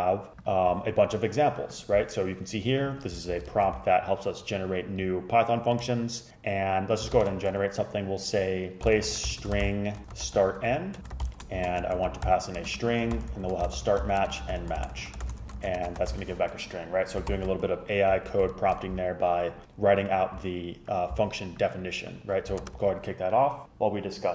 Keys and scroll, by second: 3.4 super+Left, 3.6 shift+super+Right, 7.2 shift+super+Left, 8.7-16.8 typing, 17.4 shift+super+Left, 18.6 shift+super+Right, 22.7 super+Return.